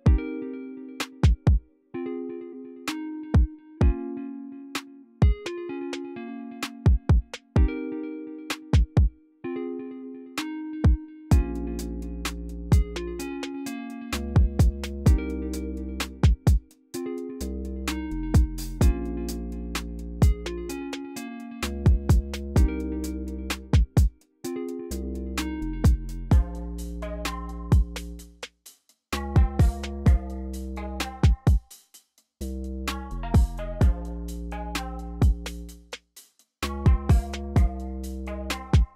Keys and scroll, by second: 27.0 c.